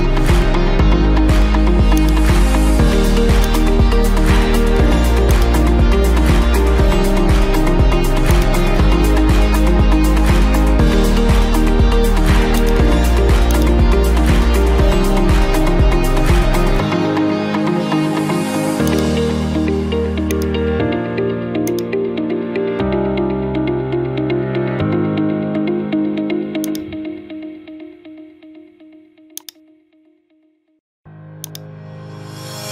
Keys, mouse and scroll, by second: 2.1-3.3 drag, 3.6-4.7 drag, 5.4-6.5 drag, 6.6 Escape, 8.4-9.5 drag, 12.7-13.6 drag, 14.9 9, 15.4 Return, 19.0 click, 20.4 click, 21.8 click, 24.2-24.6 typing, 24.9 Return, 26.7 click, 27.1 scroll, 29.5 click, 31.6 click, 32.6 click.